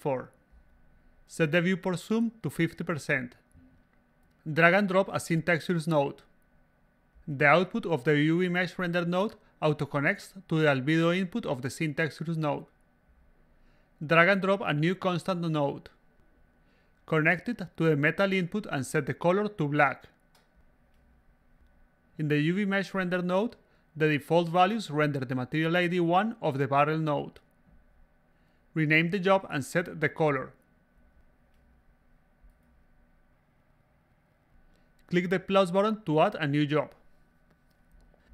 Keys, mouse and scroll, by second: 0.0-0.9 typing, 3.2 click, 4.5 click, 7.4-8.9 drag, 12.4 click, 15.1-16.2 drag, 17.0-18.1 drag, 19.0 click, 19.8 click, 20.5-21.1 drag, 21.7-27.9 drag, 27.9 s, 29.2 click, 30.2 click, 31.0 8, 31.8 5, 32.5 0, 33.1 click, 33.8 a, 33.8-34.2 drag, 36.4 click, 37.1 click, 37.2 click, 37.2-38.3 typing.